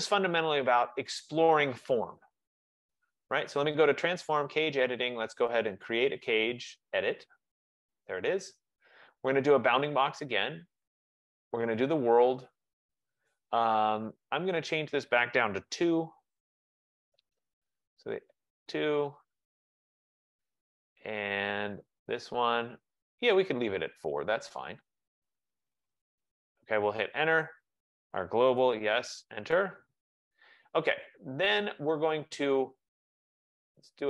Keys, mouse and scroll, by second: 0.4-3.4 drag, 4.2 F15, 7.7 click, 10.1 click, 12.5 click, 14.5 click, 15.8 2, 17.2 Return, 18.4 click, 18.8 2, 19.8 Return, 22.2 click, 26.0 Return, 26.9 Return, 27.6 v, 28.7 BackSpace, 29.2 Return.